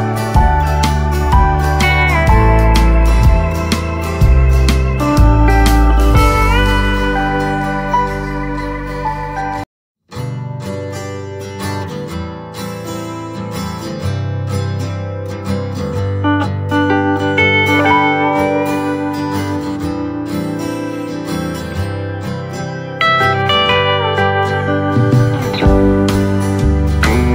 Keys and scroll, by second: 0.1 ctrl+z, 2.9 space, 3.4 space, 11.5 ctrl+z, 13.6 space, 13.9 space, 14.2 ctrl+z, 24.3 ctrl+z.